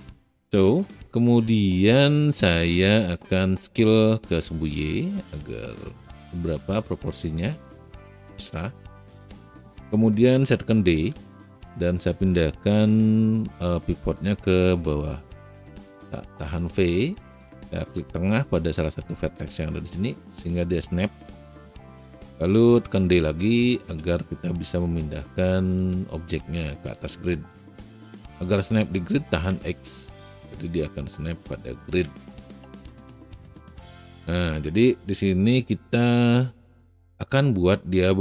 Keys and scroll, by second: 17.0 v, 23.2 d, 29.7 x.